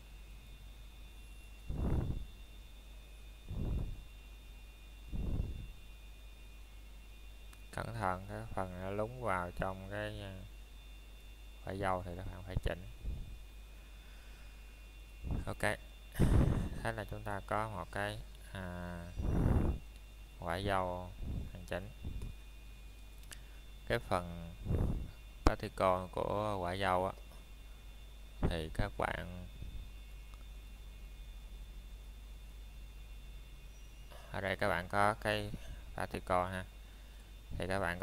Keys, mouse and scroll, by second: 0.7 click, 2.1 scroll down 1, 2.3 middle click, 2.8 scroll up 1, 3.6 middle click, 4.2-4.5 scroll down 1, 4.5 middle click, 5.3 click, 5.7 middle click, 6.0 scroll down 1, 6.3 shift+middle click, 9.1-9.5 scroll up 1, 9.5 middle click, 9.7 scroll down 1, 10.3 middle click, 10.7-11.2 scroll up 1, 11.2 middle click, 11.7 click, 12.3 middle click, 13.1 click, 13.7 middle click, 16.7 click, 19.5 click, 24.1 middle click, 25.6 shift+middle click, 25.9 scroll up 1, 31.4 scroll up 1, 32.5 ctrl+shift+a.